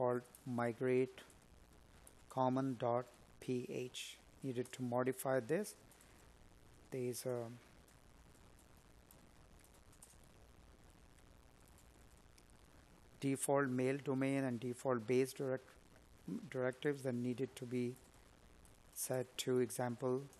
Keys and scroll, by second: 9.9 Escape.